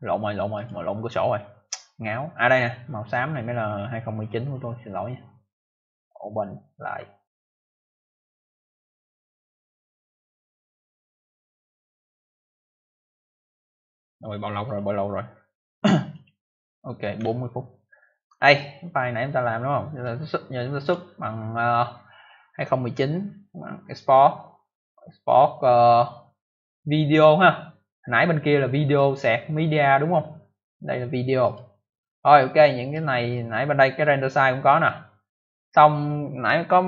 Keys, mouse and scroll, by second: 0.5 click, 1.6 click, 5.8 click, 6.9 scroll up 1, 7.5 click, 7.5 click, 8.3 click, 8.4 click, 8.5 click, 8.6 double click, 14.6 click, 14.7 click, 16.0 click, 16.2 click, 17.2 ctrl+alt+scroll down 1, 19.1 click, 20.7 click, 20.8 click, 31.4 click, 31.5 click, 32.5 click.